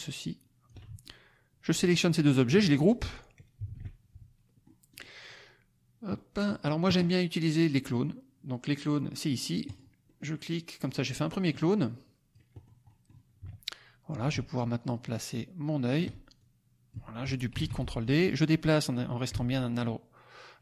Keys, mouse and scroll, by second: 0.9 ctrl+click, 3.5 ctrl+g, 4.6 click, 5.0 middle click, 5.0-5.9 scroll up 1, 5.9 scroll up 1, 6.1 middle click, 6.5-9.2 scroll up 1, 9.6 click, 10.0 middle click, 10.8 middle click, 11.4-12.5 drag, 12.5 middle click, 12.5-13.2 scroll up 2, 12.9 middle click, 14.2-16.1 ctrl+drag, 16.3 ctrl+click, 17.5 ctrl+d, 18.0-20.6 ctrl+drag.